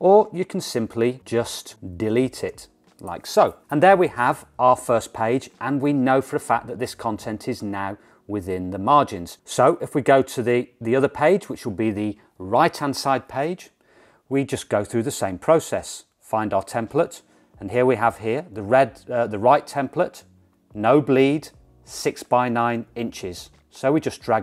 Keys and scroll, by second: 2.6 BackSpace, 9.4 BackSpace.